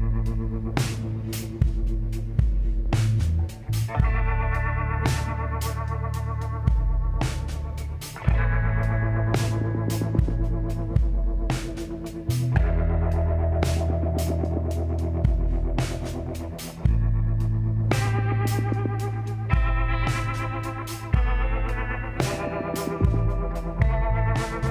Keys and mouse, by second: 1.8-3.3 drag, 3.3-5.2 middle drag, 5.2 click, 5.8 e, 7.6 s, 10.5 e, 12.2 s, 13.9 middle click, 14.7 a, 17.5-19.1 drag, 19.1 ctrl+KP_Add, 19.3 ctrl+KP_Add, 19.8-20.9 middle drag, 22.5 click, 24.5 middle click.